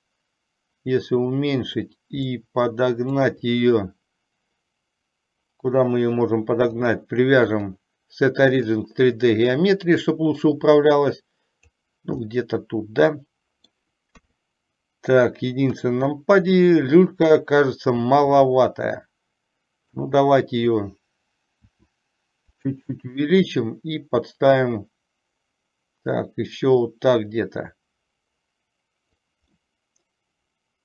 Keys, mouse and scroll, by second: 2.5 scroll up 1, 2.6 middle click, 6.8-9.0 drag, 10.8-12.1 drag, 12.5-14.1 middle drag, 14.1 scroll down 1, 14.3 KP_3, 15.8 KP_1, 18.5 s, 21.8 s, 23.6 click, 24.0-29.5 drag, 29.8-30.8 middle drag.